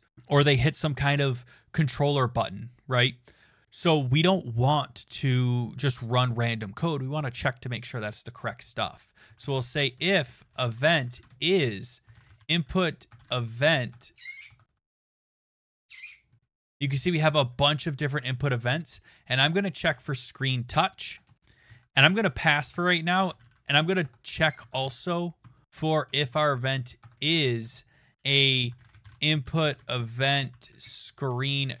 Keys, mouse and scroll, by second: 9.1-16.8 typing, 20.4 Down, 20.4 Return, 20.6-27.7 typing, 21.2 Return, 29.4-31.8 typing.